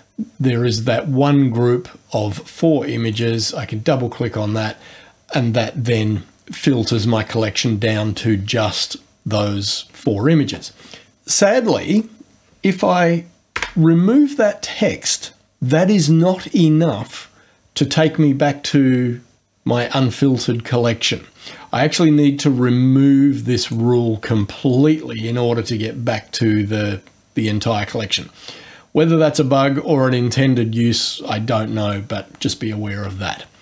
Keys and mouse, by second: 3.1 click, 11.3 click, 22.2 click, 23.6 click.